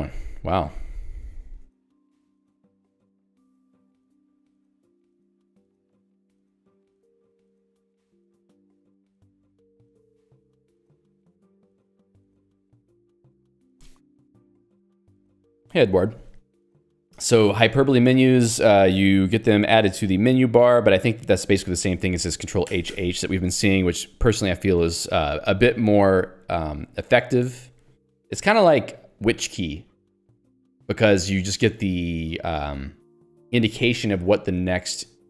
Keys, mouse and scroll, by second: 0.5 j, 0.8 k, 1.8 ctrl+d, 10.6 ctrl+u.